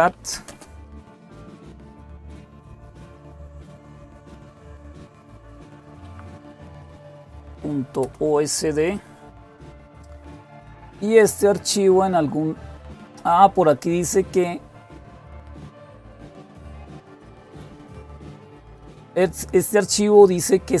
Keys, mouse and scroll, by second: 0.0-5.5 typing, 6.7-7.8 typing, 16.2-17.0 scroll down 2, 18.7-20.8 scroll down 2.